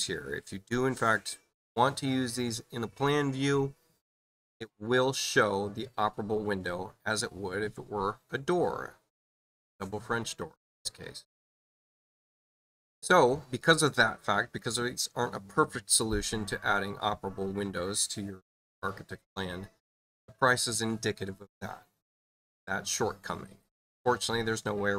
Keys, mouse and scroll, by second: 12.0 click.